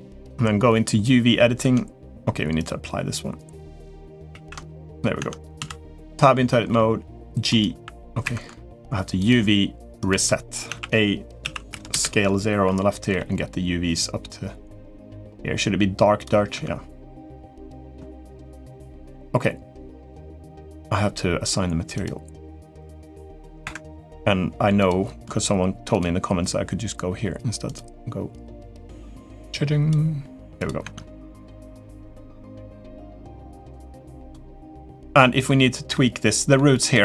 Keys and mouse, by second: 0.0 click, 1.4 Tab, 2.3 click, 4.1 ctrl+a, 4.7 click, 4.9 Tab, 5.3 a, 6.5 g, 7.3 right click, 9.1-9.9 drag, 10.4 a, 11.2 s, 12.9 g, 15.4 g, 16.3 Tab, 17.1 click, 19.8 click, 24.6 click, 27.4-29.7 drag, 30.6 Tab, 31.1 click, 31.4-31.8 middle drag, 32.3 middle click, 33.4 click, 34.3 middle click, 34.9 middle drag, 35.7-36.3 middle drag, 36.9 Tab.